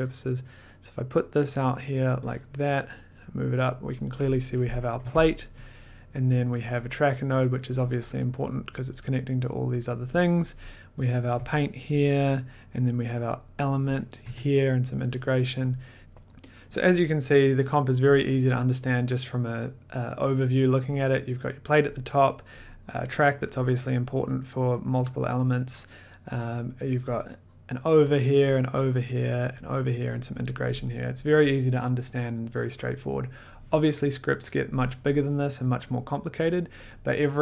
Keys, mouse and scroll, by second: 0.5 middle click, 1.6 click, 2.6 click, 3.8 click, 4.0 click, 4.6 click, 5.0 1, 5.7 click, 5.7 middle click, 6.0 middle click, 7.0 click, 7.9 click, 8.0 middle click, 9.6-10.0 scroll, 11.3 click, 11.4 1, 12.0 click, 12.4 middle click, 12.4 click, 12.5 middle click, 12.7 middle click, 13.6 click, 14.1 click, 14.2 1, 15.2 click, 15.7 click, 15.7 middle click, 16.0 middle click, 19.8 scroll, 21.8 click, 23.1 click, 28.7 click, 29.8 click, 30.4 click, 30.7 click.